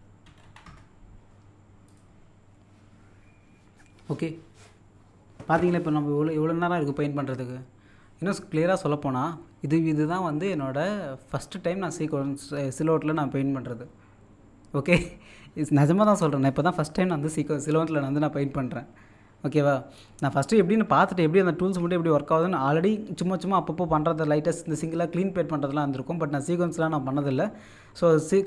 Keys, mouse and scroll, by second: 1.9 click.